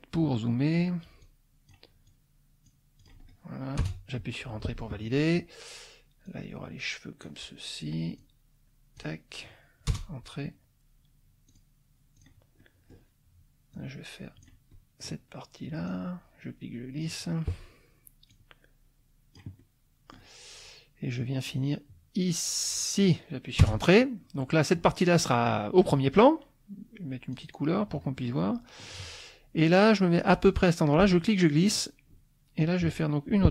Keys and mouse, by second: 1.2 click, 2.1 click, 3.0 click, 3.8 Return, 4.4 click, 4.5 middle click, 6.3-7.4 drag, 8.2 click, 8.6 middle click, 8.8 click, 9.9 Return, 11.5 click, 12.1 click, 12.6 middle click, 13.7 click, 14.7 middle click, 15.8-17.2 drag, 18.3-19.5 drag, 19.9 middle click, 21.4-23.2 drag, 23.6 Return, 24.4 middle click, 27.3 click, 28.2 middle click, 28.4 click, 30.9 click, 32.6-33.5 drag.